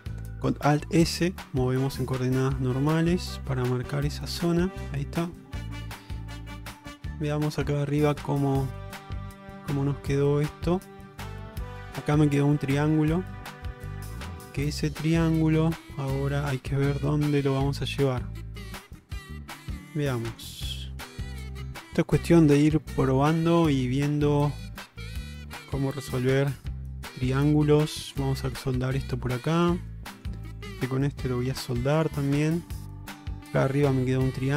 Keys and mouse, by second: 1.3 alt+s, 3.9 middle click, 4.8 Tab, 5.6 middle click, 6.2 ctrl+Tab, 7.2-7.7 middle drag, 7.8 middle drag, 8.2-8.6 middle drag, 8.8 middle drag, 9.2-9.9 middle drag, 10.6 middle click, 13.2-15.6 middle drag, 16.0-18.2 middle drag, 19.3 Tab, 19.8 shift+middle click, 20.3 middle click, 21.3 click, 22.0 click, 22.4-23.4 middle drag, 24.8 click, 25.3 shift+click, 26.3 m, 29.1 middle click, 30.6 shift+click, 31.5 m, 32.5-33.3 middle drag, 33.7-34.5 middle drag.